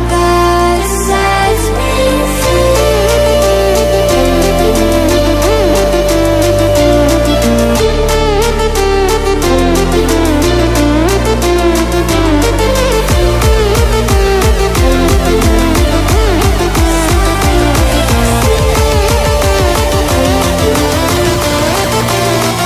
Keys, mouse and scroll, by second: 0.8 ctrl+alt+scroll down 1, 2.4 click, 3.3 ctrl+alt+scroll down 1, 3.9 ctrl+alt+scroll up 1, 5.4 ctrl+alt+scroll up 1, 6.1 click, 6.7 shift+click, 7.9-9.9 drag, 10.7 ctrl+alt+scroll down 2, 12.8 click, 13.3 shift+click, 15.1-15.7 click, 16.7-17.0 ctrl+alt+scroll down 2, 17.0-17.7 ctrl+alt+scroll up 2, 17.7-18.5 ctrl+alt+scroll up 1, 19.6 click, 22.2 click.